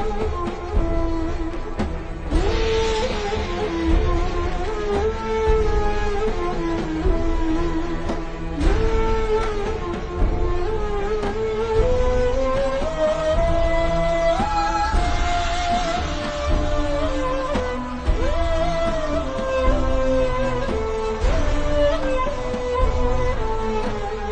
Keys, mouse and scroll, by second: 0.7 i, 1.2 v, 1.3 click, 3.2-3.7 alt+shift+scroll up 2, 3.7 click, 8.0 shift+click, 12.3 x, 12.4 click, 12.8 ctrl+shift+v, 13.5 click, 14.0 v, 14.1 click, 14.4 alt+shift+scroll down 1, 14.6-16.1 scroll up 1, 16.9 alt+shift+scroll up 1, 17.7 click, 18.4 z, 18.9 click, 22.3 shift+scroll down 1, 22.8 click.